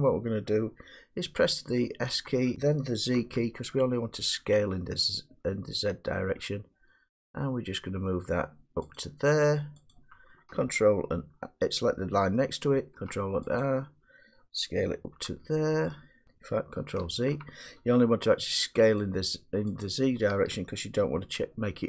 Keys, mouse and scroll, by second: 2.0 s, 3.3 z, 9.0-10.9 drag, 12.8 ctrl+r, 13.7 click, 15.2 s, 16.3 click, 17.1 ctrl+z, 19.1 click, 19.9 click.